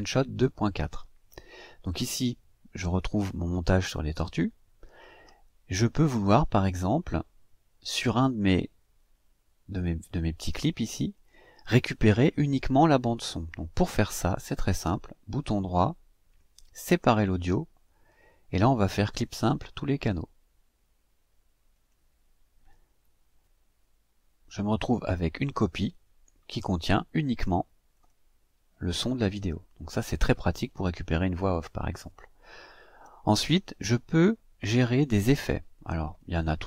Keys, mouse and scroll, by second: 5.8-6.4 scroll up 2, 9.4-10.4 drag, 10.9 click, 14.6 right click, 21.5 click, 25.6-27.4 drag, 27.7 click, 32.8 Delete, 35.9 click.